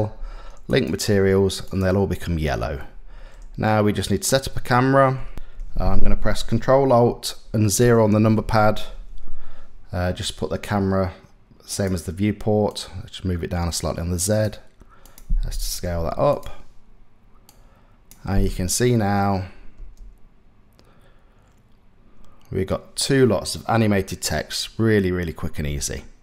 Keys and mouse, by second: 1.3 click, 2.4 middle click, 3.7 click, 7.4 ctrl+alt+KP_0, 12.5-15.5 drag, 15.5 s, 17.1 click, 18.5 click, 19.4 space, 25.3 space.